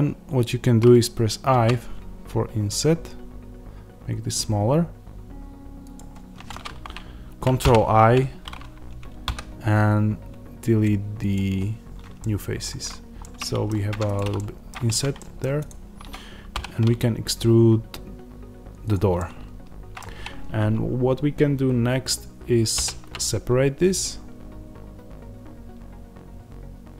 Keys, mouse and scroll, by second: 1.4 i, 5.9 click, 7.5 ctrl+i, 11.2 x, 12.1-13.9 middle drag, 13.8 Tab, 13.9 click, 14.2-15.5 middle drag, 14.8 Tab, 15.5 click, 16.4 e, 18.8 click, 19.1-26.9 middle drag, 22.6 ctrl+r.